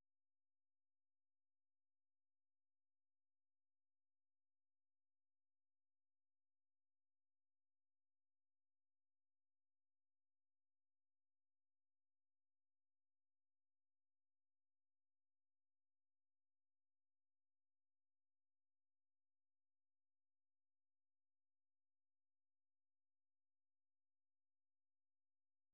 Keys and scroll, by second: 1.7 typing, 2.8-9.0 typing, 16.3-20.6 typing.